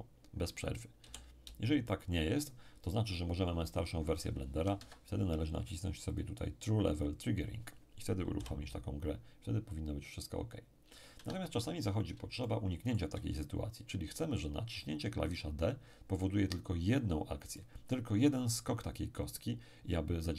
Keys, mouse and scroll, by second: 0.3-0.7 scroll down 1, 1.0 p, 1.4 d, 1.7 d, 4.7 Escape, 6.1 click, 8.3 p, 8.7 d, 8.9 d, 11.1 Escape, 12.4-13.9 shift+middle drag, 16.7-17.5 scroll up 1, 17.5-18.9 middle drag.